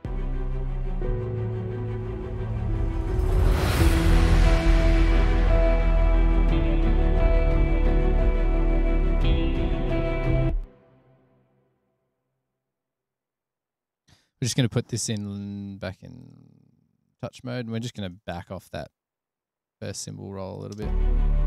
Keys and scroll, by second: 0.0-0.1 typing, 3.3 F8, 12.6 super+=, 18.5 super+=, 21.1 space.